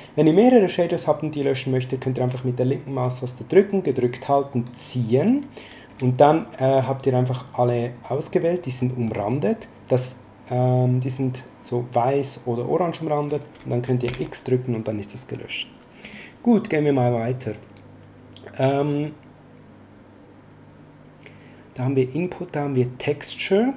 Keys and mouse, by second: 3.4 click, 8.7 middle click, 14.0 x, 16.0 click.